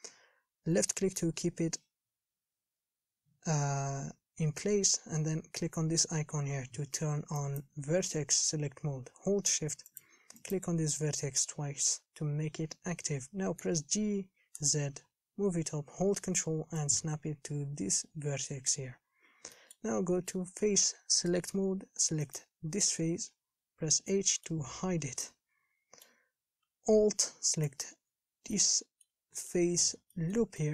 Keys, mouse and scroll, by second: 7.6-10.2 drag, 13.8 g, 19.3-19.8 scroll up 1, 19.8-21.4 shift+middle drag, 21.4 click, 22.5 click, 23.1 h, 24.3 middle click, 25.0-25.5 scroll down 1, 25.5-27.8 middle drag, 27.8 alt+click, 28.8-30.7 middle drag.